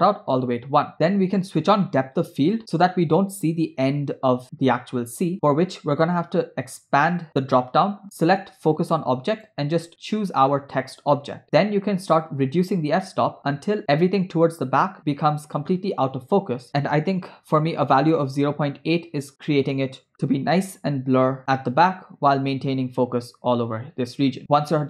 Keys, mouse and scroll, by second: 2.6 click, 6.7 click, 9.3 click, 12.2-18.3 drag, 20.1-20.5 scroll up 3, 21.4 scroll down 2, 22.9 scroll down 2, 24.3 space, 24.4 space.